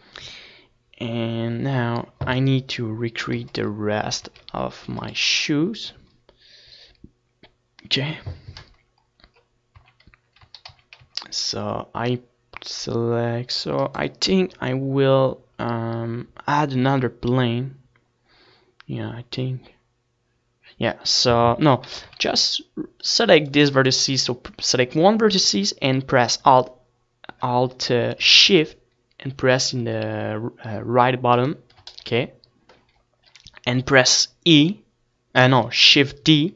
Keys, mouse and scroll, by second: 0.3 ctrl+s, 4.0 ctrl+s, 4.6-7.0 middle drag, 5.0 z, 5.7 ctrl+s, 10.0-12.0 middle drag, 10.1 Tab, 10.7 z, 11.3 a, 11.5 z, 11.7 c, 15.2-17.0 right drag, 24.1 c, 26.2-28.2 right drag, 28.2-34.2 middle drag, 34.2-35.9 right drag, 34.7-36.0 middle drag, 36.0 KP_1.